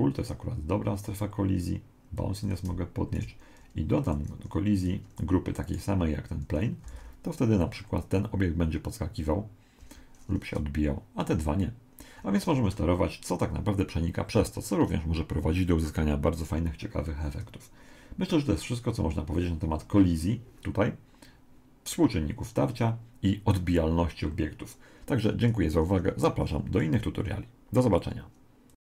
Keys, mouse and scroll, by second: 2.2 click, 4.0 click, 5.7 right click, 6.9 alt+a, 9.8 Escape.